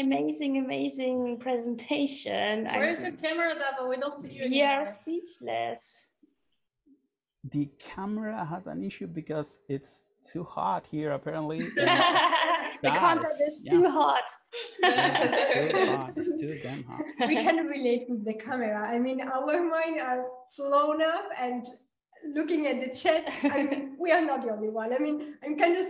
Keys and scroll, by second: 16.6 super+a, 17.8 BackSpace, 22.7-24.1 typing.